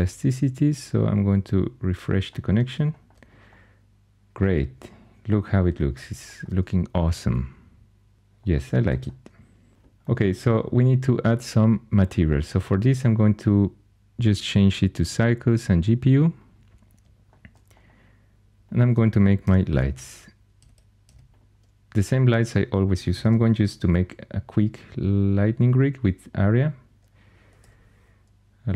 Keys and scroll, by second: 19.3 x, 20.5 x, 20.9 x, 23.1 shift+a, 27.1-27.9 typing.